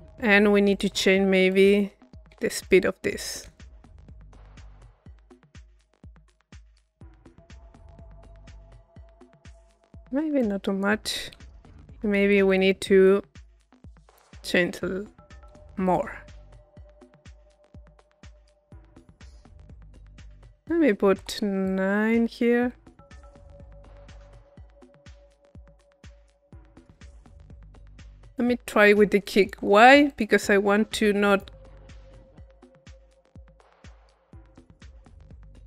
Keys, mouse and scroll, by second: 0.7-4.6 drag, 10.3 click, 11.7 click, 13.0 click, 14.1-16.3 drag, 17.3 click, 19.3 click, 20.1 click, 21.7-22.7 drag, 28.3 click, 29.3 click, 31.3 click, 31.9 click.